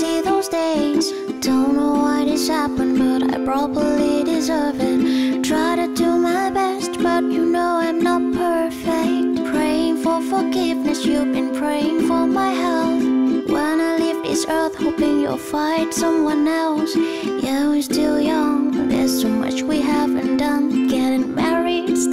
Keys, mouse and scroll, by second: 21.2 F9.